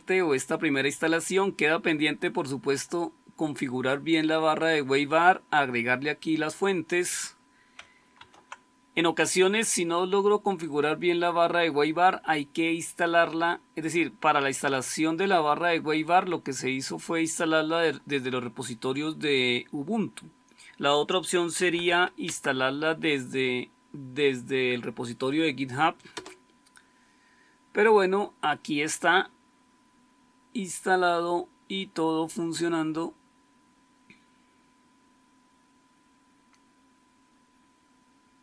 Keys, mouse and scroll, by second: 8.2 super+1, 21.3-22.3 typing, 26.1 Return.